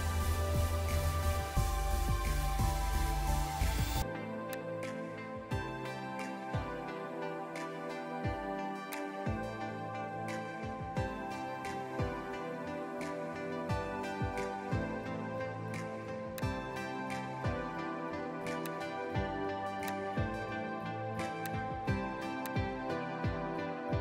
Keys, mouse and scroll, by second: 0.1 ], 7.0 ctrl+z, 7.6 [, 7.7 [, 11.5 scroll up 1, 12.7 [, 23.2 [, 23.8 [.